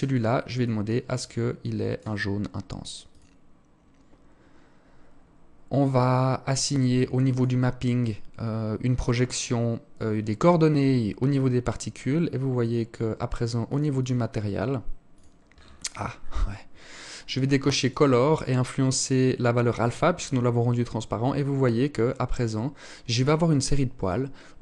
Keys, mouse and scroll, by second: 5.2-6.4 scroll down 8, 6.4 click, 8.0 click, 9.4 click, 11.2-12.8 scroll up 10, 12.8 click, 12.8-13.1 scroll up 1, 13.1 click, 14.3 click, 14.6-15.1 scroll down 10, 15.0 scroll up 1, 15.2-16.2 scroll down 4, 17.0 click, 17.4 click, 19.3-21.6 scroll up 14.